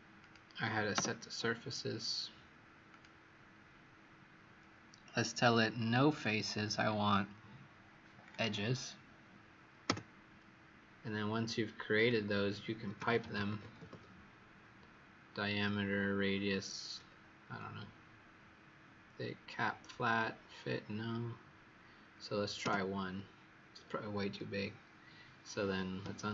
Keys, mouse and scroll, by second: 0.1 click, 2.8 click, 9.8 Return, 11.9 click, 12.9-14.2 typing.